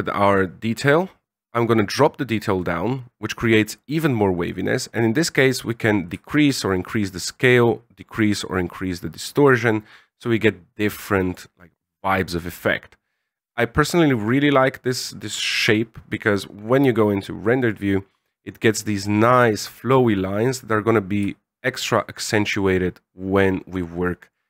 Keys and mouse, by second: 0.4-2.6 drag, 4.2-5.8 drag, 6.0-7.3 shift+drag, 7.6-11.3 drag, 12.7 click, 14.3-15.0 middle drag, 15.5 KP_0, 22.3-24.3 shift+drag.